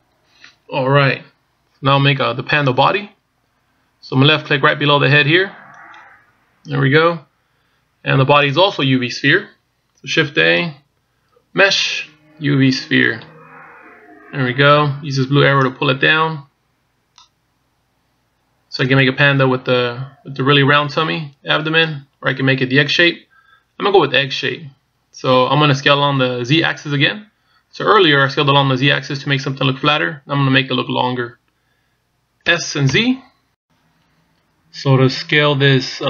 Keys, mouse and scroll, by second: 2.0-2.7 scroll down 2, 2.7-5.8 scroll down 1, 6.6 click, 11.1 shift+a, 14.6-16.6 scroll down 2, 16.7 click, 20.0-21.3 scroll down 2.